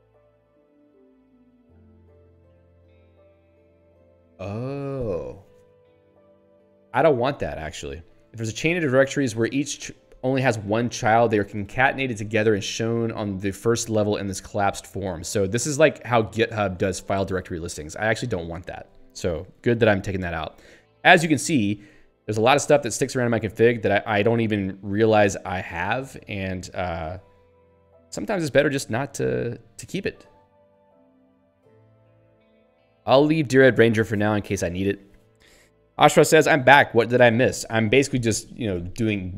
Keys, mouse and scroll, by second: 19.4 ctrl+p, 21.8 ctrl+a, 22.2 ctrl+k, 23.5 ctrl+s, 25.1 ctrl+p, 27.3 shift+j, 28.1 BackSpace, 28.3 Delete, 30.2 ctrl+k, 32.6 ctrl+s.